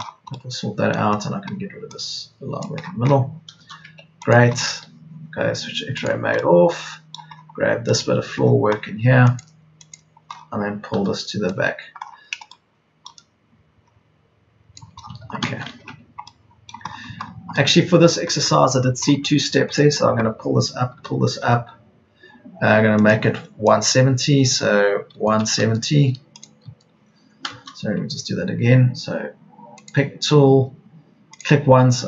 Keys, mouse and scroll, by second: 1.6 e, 3.6 space, 3.8 Escape, 10.8 p, 15.0 Escape, 16.9 Escape, 18.6 Escape, 20.8 p, 25.2 KP_1, 25.4 KP_7, 25.6 KP_0, 27.6 KP_0, 27.7 Escape.